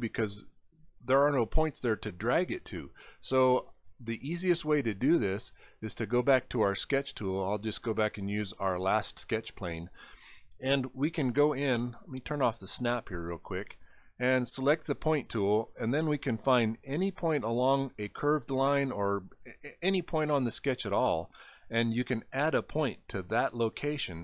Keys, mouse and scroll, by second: 5.5 click, 6.9 right click, 8.8 click, 12.7 click, 15.6-16.1 scroll up 5, 20.9 click, 23.9 scroll down 4.